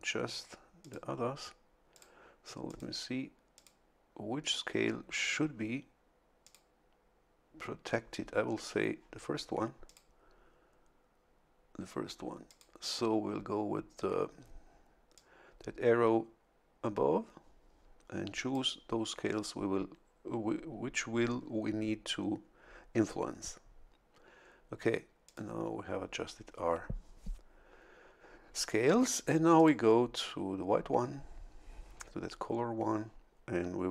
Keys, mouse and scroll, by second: 0.8 click, 1.9 click, 2.7 click, 3.5 click, 5.1 scroll up 1, 6.4 click, 9.8 click, 12.5 click, 15.1-18.7 drag, 25.2 click, 29.6 click.